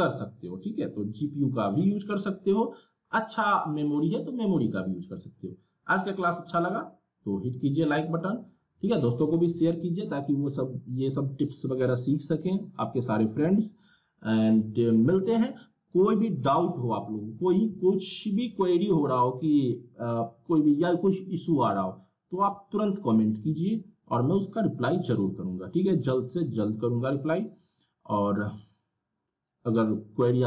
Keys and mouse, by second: 6.3-12.1 drag.